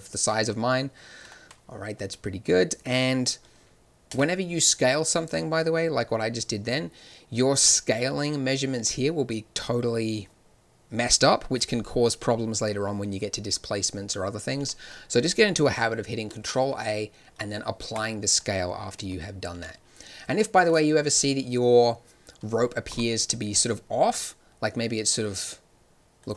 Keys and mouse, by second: 4.0 n, 14.5 n, 16.2 ctrl+a, 18.9 n, 19.5 n, 20.0-22.6 drag, 22.8 g.